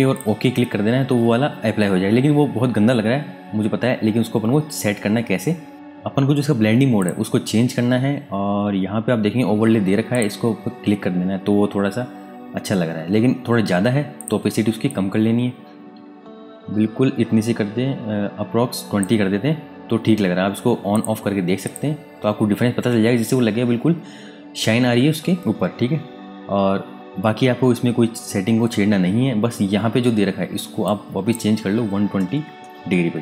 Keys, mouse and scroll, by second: 5.7 Tab, 7.0 click, 10.1 click, 14.1 click, 30.8 click, 32.2 KP_1, 33.0 Tab.